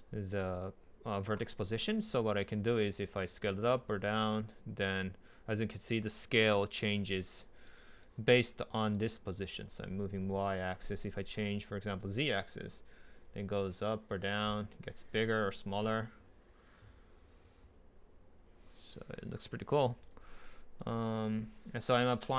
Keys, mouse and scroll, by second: 0.0-1.5 drag, 1.5-2.5 scroll down 2, 2.5 scroll down 1, 2.5 click, 2.7 scroll up 1, 4.5-6.2 middle drag, 4.5 scroll down 1, 4.8 scroll up 1, 7.5 right click, 7.8 click, 7.9 click, 10.4 scroll down 1, 10.7 scroll up 1, 11.2 ctrl+z, 12.0 scroll down 1, 16.8-18.8 right drag, 20.1 ctrl+z, 20.8 click, 21.9 click.